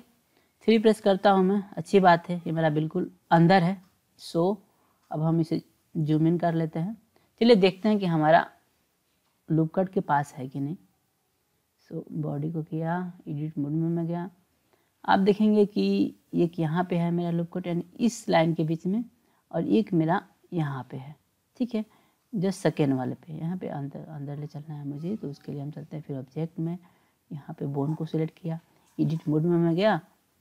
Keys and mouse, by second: 0.8 KP_3, 3.3 KP_1, 5.2-7.1 drag, 7.9-9.1 drag, 10.6-11.4 drag, 11.7 click, 12.5-13.5 drag, 25.5-26.3 drag, 27.3 click, 28.4-29.5 drag.